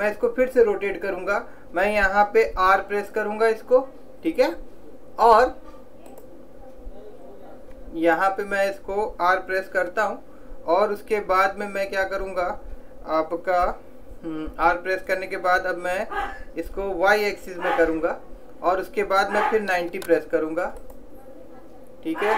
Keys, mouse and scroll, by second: 2.7 r, 10.0 r.